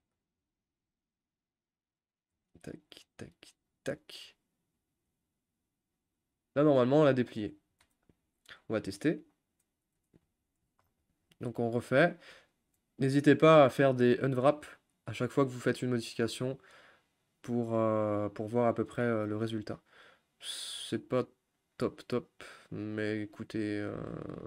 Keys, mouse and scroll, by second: 0.9-2.6 middle drag, 2.6 shift+click, 3.2 shift+click, 4.6-9.3 middle drag, 9.3 u, 10.0 a, 10.3-10.8 scroll down 6, 13.1-15.1 scroll up 1, 15.1 u.